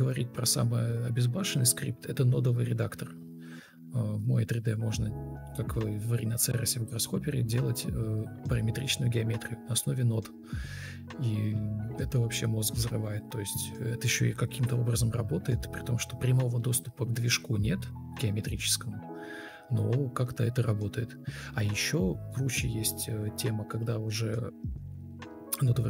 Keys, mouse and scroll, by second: 0.0 ctrl+c, 0.1 ctrl+z, 0.5 ctrl+z, 2.0 ctrl+v, 10.0 ctrl+x, 10.9 Delete, 11.2 ctrl+v, 11.6 ctrl+space, 11.6 ctrl+space, 18.2 ctrl+space, 19.4 alt+`, 19.6 Escape, 20.2 Delete, 20.4 Escape, 22.9 Delete, 24.6 Delete.